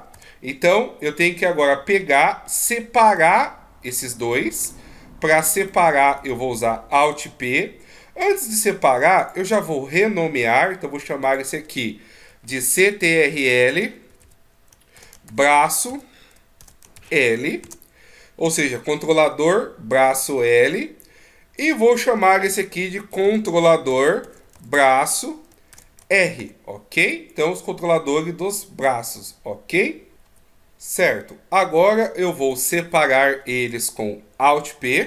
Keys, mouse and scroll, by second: 1.1 middle click, 3.1 right click, 4.6 right click, 9.2 click, 20.4 right click, 21.6 click, 32.1 right click.